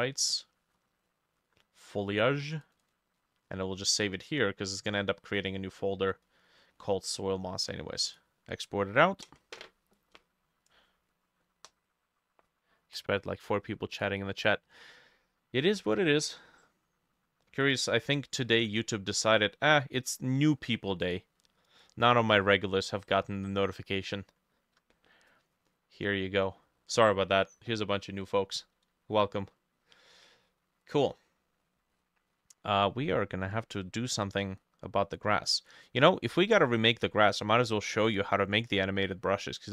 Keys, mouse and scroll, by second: 2.9-7.4 drag, 18.5 ctrl+s, 25.7 scroll down 2, 26.0 middle click, 26.4 scroll down 1, 26.7 middle click, 27.1 middle click, 32.0-33.0 scroll up 6, 36.3-39.4 drag, 36.3-37.0 scroll down 2, 37.3-38.1 scroll up 3.